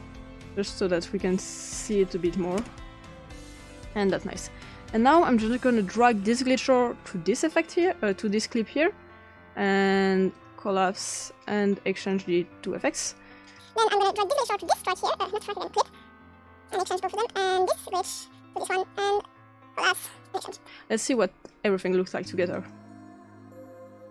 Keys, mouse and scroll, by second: 1.5 click, 2.3 7, 2.6 Return, 6.0-7.5 drag, 8.1 click, 10.3 click, 10.9 click, 12.0 click, 13.4 click, 14.2-14.7 drag, 15.1 click, 15.9 click, 16.1 click, 16.7 click, 17.3 click, 17.9-18.4 drag, 18.6 click, 19.6 drag, 19.8 click, 20.3 click, 21.1 click, 22.5 click.